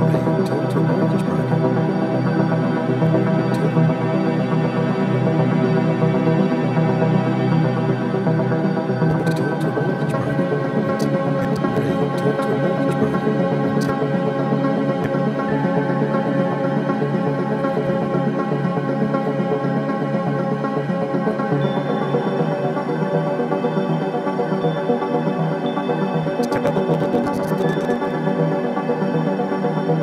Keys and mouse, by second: 1.9 space, 3.0 click, 3.2-3.6 typing, 4.1-4.6 drag, 5.4 typing, 5.9 click, 6.8-8.2 typing, 7.3-9.9 drag, 9.2-11.6 typing, 11.4-13.7 drag, 13.5-14.2 typing, 15.0-19.0 drag, 19.0 typing, 20.3 typing, 20.3-23.1 drag, 23.4-24.9 typing, 24.4-28.9 drag, 29.2 alt+g.